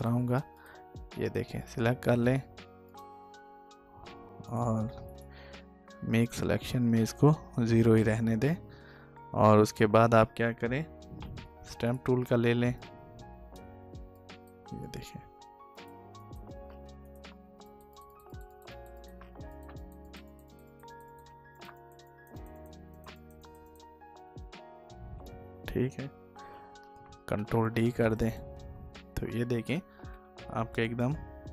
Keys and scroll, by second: 26.3 ctrl+d.